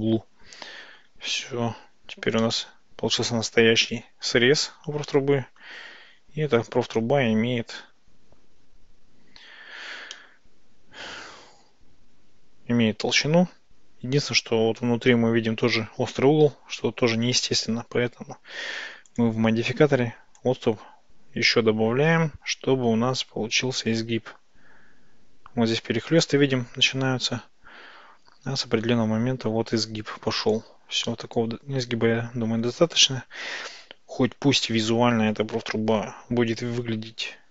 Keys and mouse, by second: 2.5-4.3 middle drag, 5.1-5.7 middle drag, 10.2-12.9 middle drag, 20.5-30.6 drag, 31.1-35.4 middle drag.